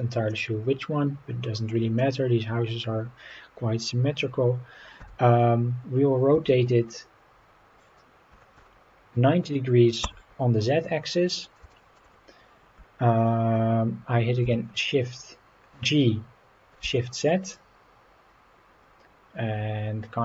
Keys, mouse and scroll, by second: 0.3-1.7 middle drag, 2.6-3.0 scroll up 2, 5.0 r, 8.3 KP_9, 8.5 KP_0, 10.0 Return, 10.9 scroll down 1, 11.0-11.4 middle drag, 11.7 shift+middle click, 14.4 g, 16.8 shift+z.